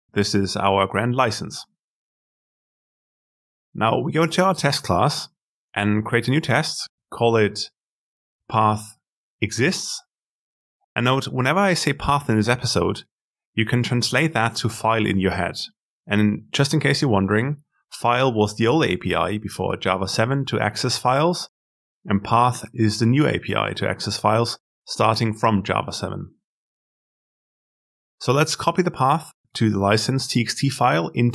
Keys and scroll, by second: 5.1 alt+Insert, 30.5 ctrl+v.